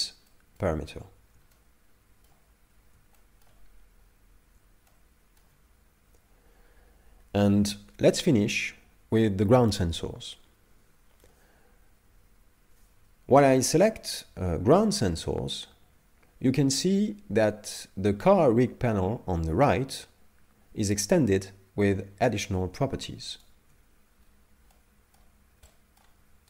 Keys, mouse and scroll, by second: 0.3 middle click, 1.5 shift+middle click, 2.6 scroll down 2, 3.2 shift+middle click, 4.0 scroll up 1, 4.9 shift+middle click, 14.1 right click, 17.2 right click, 23.5 shift+right click, 24.2-24.7 scroll down 4, 24.7 middle click, 25.7 middle click.